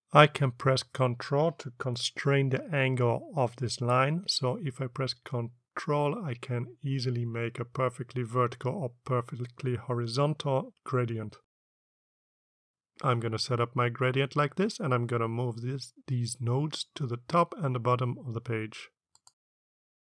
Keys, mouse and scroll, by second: 0.2-15.0 drag, 16.2-19.2 drag.